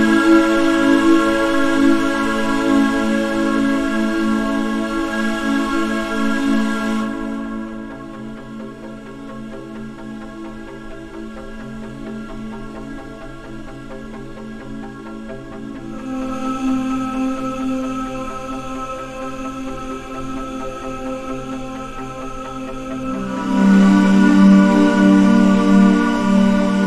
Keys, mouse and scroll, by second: 1.1 click, 1.6-7.0 drag, 9.6-13.2 drag.